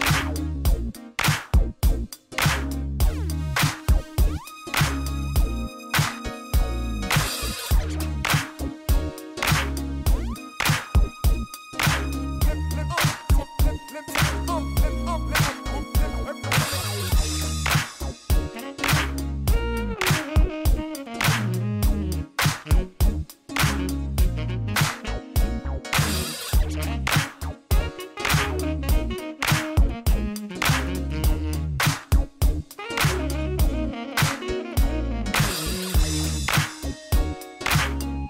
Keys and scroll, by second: 8.1 shift+z, 10.7 shift+z, 11.7 g, 11.9 z, 18.2 6, 18.3 Return, 20.2 g, 20.3 z, 22.5 g, 22.7 z, 27.4 g, 27.6 y, 28.4 Escape, 28.7 g, 28.9 x, 32.0 g, 32.2 x, 37.9 s.